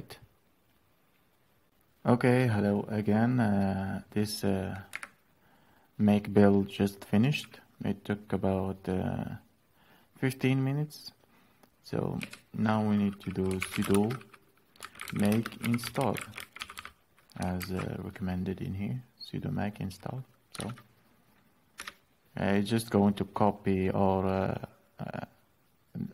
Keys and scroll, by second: 4.5 Up, 11.9 Down, 13.0-17.8 typing, 20.3 alt+Tab, 21.6 Return.